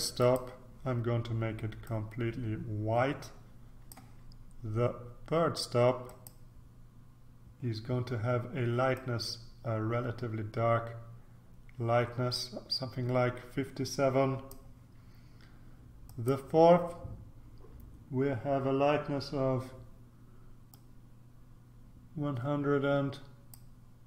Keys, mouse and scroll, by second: 0.2 click, 1.8-4.4 drag, 6.0 click, 8.9-15.0 drag, 16.0 click, 20.7-24.0 drag.